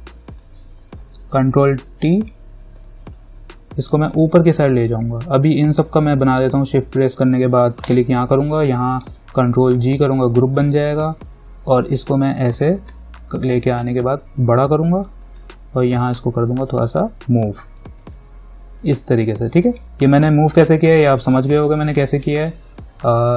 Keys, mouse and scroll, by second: 0.5 click, 1.6 ctrl+y, 4.2-5.5 drag, 9.9 ctrl+g, 10.5 click, 13.1 ctrl+t, 14.6-16.0 alt+drag, 19.0-22.2 drag, 22.2-23.3 alt+drag.